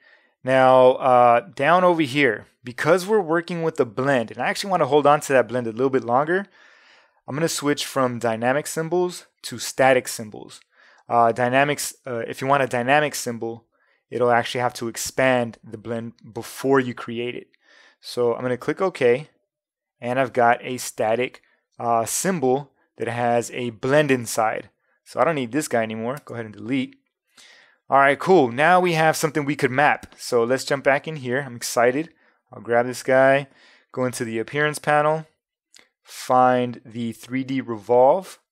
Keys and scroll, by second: 26.2 BackSpace.